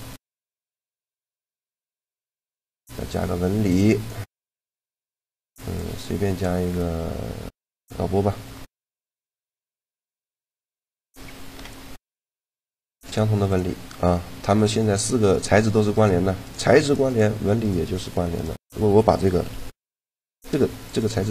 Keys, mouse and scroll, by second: 0.6 middle click, 1.4-5.2 drag, 5.4-7.1 drag, 8.6-10.4 middle drag, 9.0-11.3 right drag, 11.3 shift+l, 14.4 click, 14.9 right click, 15.8 click, 16.0-19.8 right drag, 19.3 g.